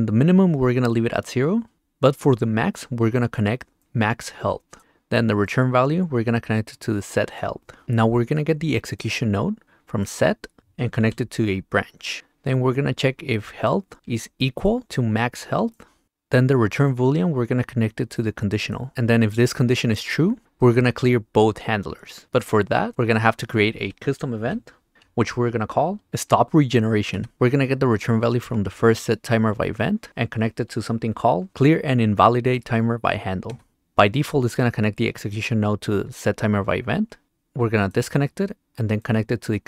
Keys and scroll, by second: 11.0 r, 14.0 q, 24.9 Return, 26.1 n, 27.3 Return, 31.5 e, 33.5 Return.